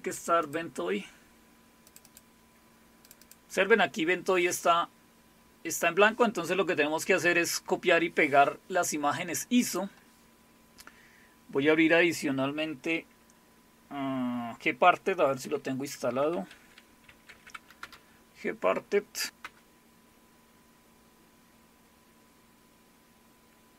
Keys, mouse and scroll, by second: 0.4 click, 1.9 click, 3.1 click, 3.2 click, 9.6 click, 15.4 alt+super+r, 16.3-17.8 typing, 17.8 Return, 19.4 Return.